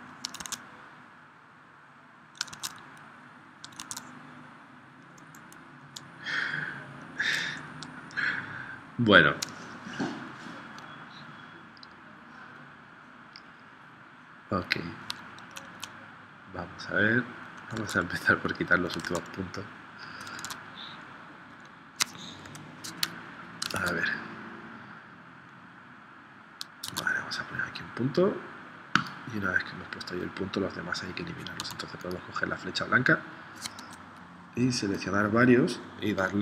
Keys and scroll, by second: 0.4 super+Tab, 2.6 super+Tab, 3.8 super+Tab, 17.7 super+Tab, 19.1 super+Tab, 20.3 super+Tab, 22.6 p, 23.8 super+Tab, 26.9 super+Tab, 31.7 a.